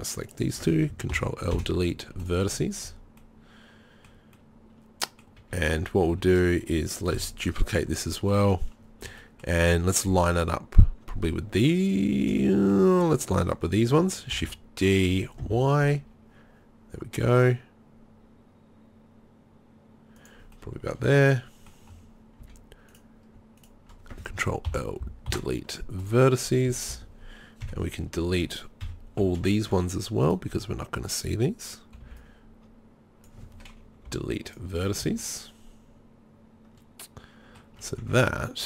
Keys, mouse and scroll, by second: 1.1 ctrl+l, 1.5 Delete, 5.4 a, 5.7 a, 6.1 a, 7.2 KP_3, 14.3 shift+d, 20.3-20.9 middle drag, 20.9 click, 21.4-22.1 middle drag, 22.5 z, 24.7 ctrl+l, 25.3 Delete, 26.9 z, 27.7 KP_1, 28.9 KP_3, 29.2 z, 32.0 b, 34.1 Delete, 35.0 z, 38.0 Tab.